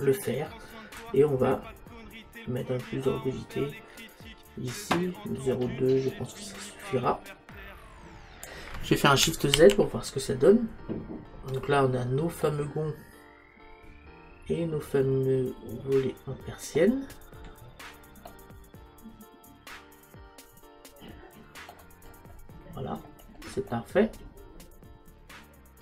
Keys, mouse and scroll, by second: 1.0 click, 9.8 shift+z, 11.6-13.7 middle drag, 13.8 middle click, 17.6-20.1 middle drag, 22.2-25.7 middle drag.